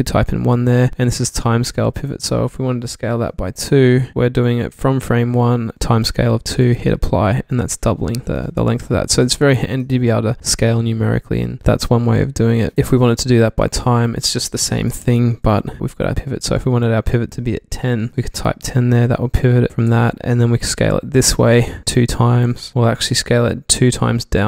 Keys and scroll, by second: 3.1 2, 3.9 Tab, 9.2 super+z, 12.8 Tab, 12.8 1, 14.9 Tab, 14.9-15.5 typing, 15.5 Tab, 18.1 typing, 18.4 Tab, 22.7 Tab, 22.7 typing.